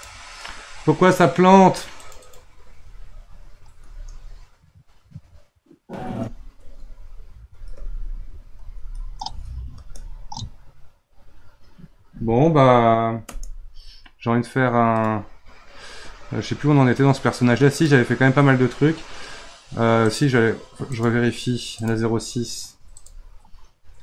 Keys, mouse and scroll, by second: 3.8 space, 6.1 space, 7.6 Right, 7.8 Right, 8.8 Left, 9.8 space, 13.4 space, 14.9-24.0 drag.